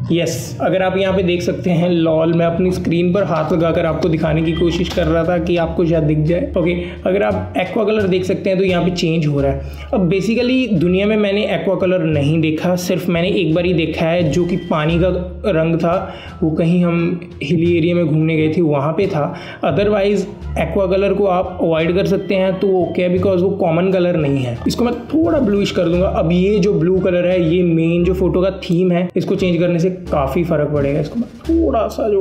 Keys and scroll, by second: 2.7 alt+space, 3.5 alt+space, 4.2 space.